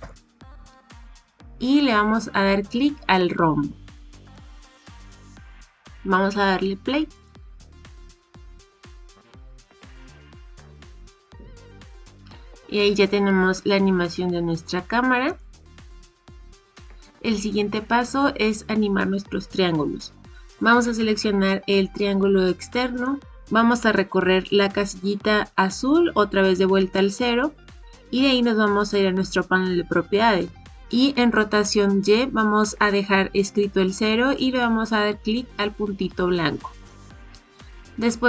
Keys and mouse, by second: 4.3 click, 7.1 click, 15.2 click, 16.2-17.0 drag, 22.9 click, 36.7 click.